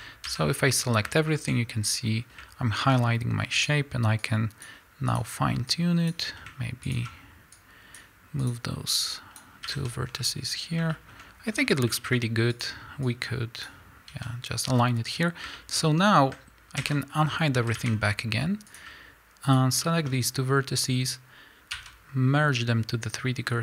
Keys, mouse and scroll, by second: 0.0 scroll down 1, 0.3 a, 1.1-3.6 shift+middle drag, 2.9-3.6 scroll up 2, 3.6 click, 4.2 click, 5.7-6.9 drag, 7.5 click, 9.1-11.0 drag, 9.7 a, 10.1 scroll down 1, 11.0-12.6 shift+middle drag, 11.5 scroll up 1, 12.1-12.6 scroll up 1, 13.0-15.6 drag, 14.1 a, 14.8-15.6 scroll down 1, 15.6-18.7 shift+middle drag, 16.0-16.4 scroll down 1, 16.8 alt+h, 17.7 a, 18.0 scroll up 1, 18.7 click, 19.5 shift+click, 19.8-23.6 shift+middle drag.